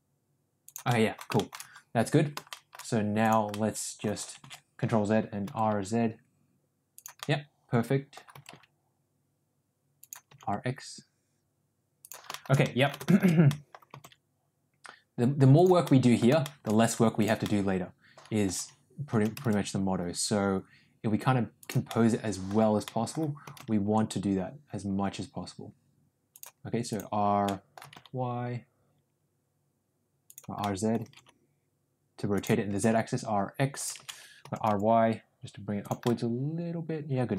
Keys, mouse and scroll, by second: 0.8 middle click, 1.3 shift+middle click, 2.4 shift+middle click, 3.3 click, 3.5 middle click, 4.6 ctrl+z, 5.3 r, 7.2 middle click, 8.3 r, 10.2 r, 12.2 shift+middle click, 12.5 middle click, 13.0 shift+middle click, 13.5 middle click, 13.9 r, 15.8 middle click, 16.4 scroll up 1, 16.4 middle click, 17.2 click, 17.4-18.4 middle drag, 19.0 r, 21.8 scroll up 1, 21.9 middle click, 22.7 scroll up 1, 22.9 middle click, 23.4 r, 26.9 click, 27.4 middle click, 27.8 r, 30.5 scroll up 1, 30.7 middle click, 31.0 r, 32.6 r, 34.2 ctrl+z, 34.4 r, 36.0-37.3 middle drag.